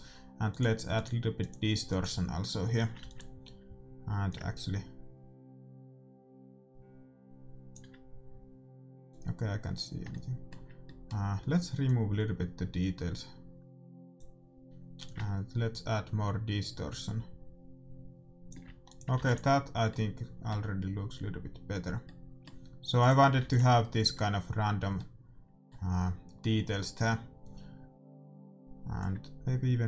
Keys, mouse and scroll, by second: 0.6-3.9 drag, 3.1 ctrl+s, 4.3-6.1 drag, 9.3-11.3 drag, 10.4-12.5 middle drag, 12.0-13.7 drag, 15.1-17.1 drag, 19.2-20.6 drag, 19.3 ctrl+s, 20.1-22.1 middle drag, 22.3-24.1 middle drag, 23.3-25.1 drag, 23.7 ctrl+s, 25.2-28.9 middle drag, 28.9-29.8 drag.